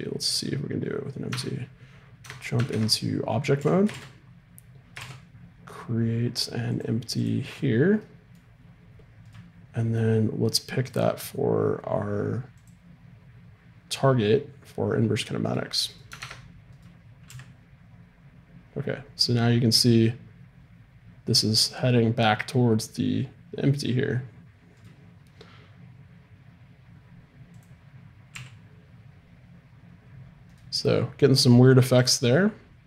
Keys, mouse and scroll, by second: 1.3 Tab, 2.2 Tab, 3.6 a, 5.0 shift+a, 8.0-9.2 middle drag, 9.2-12.7 right drag, 10.9-12.7 drag, 15.4-17.3 right drag, 16.2 ctrl+Tab, 17.3 g, 27.5-30.2 drag, 28.3 g, 32.2-32.8 drag.